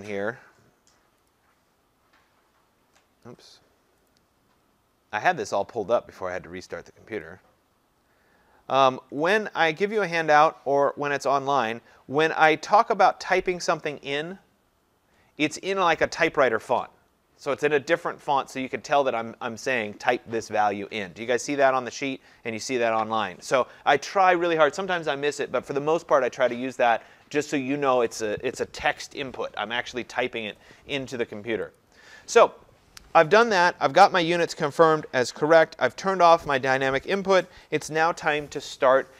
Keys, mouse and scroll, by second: 1.3 click, 4.1 click, 7.3 click, 8.8-9.7 scroll, 10.2 click, 11.7 middle click, 11.7 scroll, 13.7 click, 14.8-15.2 scroll, 31.8 click.